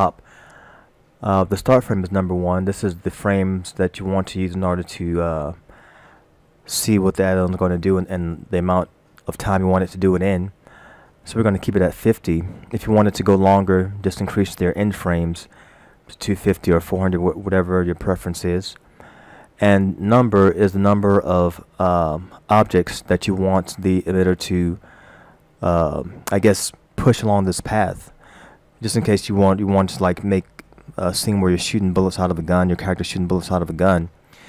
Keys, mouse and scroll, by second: 5.6 scroll down 1, 21.8 scroll down 1.